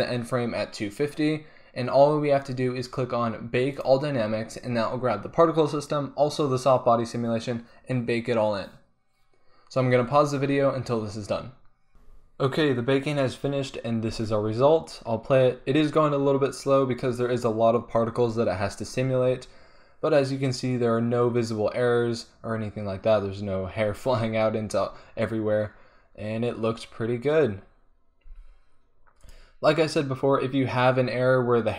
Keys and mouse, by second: 14.2 alt+a, 28.4 alt+a, 29.2-31.6 drag.